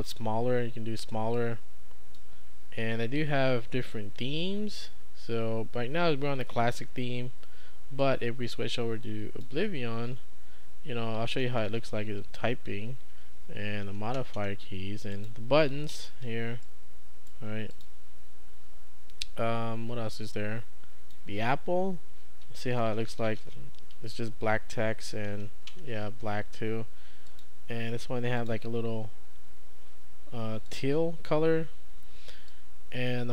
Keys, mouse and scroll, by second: 1.4 click, 8.0-9.5 drag, 11.0-12.6 typing, 15.2 click, 15.9 scroll up 2, 16.0 click, 16.5 scroll up 2, 16.7-17.8 right drag, 17.7 click, 20.2-21.1 scroll up 2, 21.1 click, 22.3-23.9 typing, 27.3 click, 28.4 click, 30.7 click, 32.5 click.